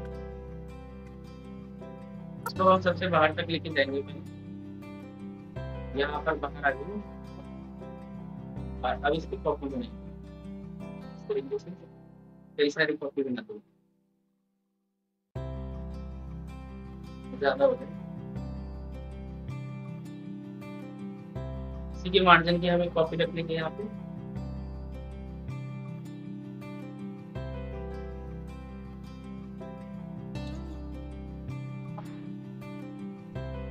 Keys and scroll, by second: 0.8 ctrl+k, 14.5 ctrl+d, 14.8 ctrl+d, 17.2 ctrl+z, 17.3 ctrl+z, 26.9 ctrl+z, 32.0 ctrl+z.